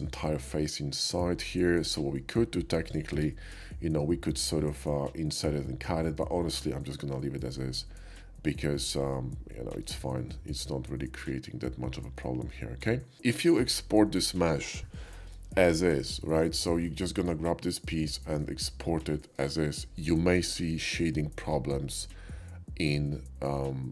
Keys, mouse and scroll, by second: 1.0-2.2 shift+middle drag, 2.9 click, 3.1 Tab, 3.7 middle click, 5.4 middle click, 6.9-9.8 middle drag, 10.1-12.5 middle drag, 16.8-18.4 middle drag, 19.2 shift+middle click.